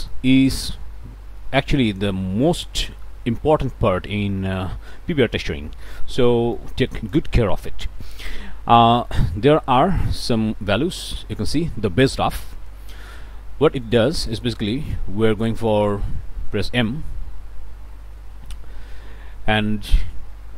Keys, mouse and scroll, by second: 0.5 scroll up 1, 2.7 middle click, 6.5 click, 8.1 scroll up 1, 8.8 middle click, 9.0 click, 10.2-11.5 drag, 13.7 click, 18.1 m.